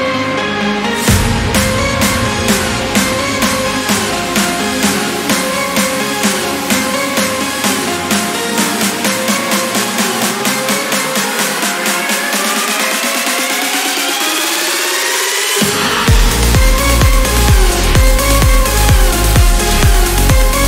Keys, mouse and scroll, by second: 0.4-0.8 ctrl+scroll up 2, 2.0 ctrl+click, 2.6 ctrl+scroll down 2, 4.0 ctrl+click, 5.2 scroll down 2, 5.6 scroll up 2, 8.1 ctrl+click, 10.3 ctrl+click, 11.8 ctrl+click, 12.6 ctrl+scroll down 1, 15.2-15.6 scroll up 1, 18.4-18.7 scroll up 1, 19.4 click, 20.2-20.6 scroll down 1.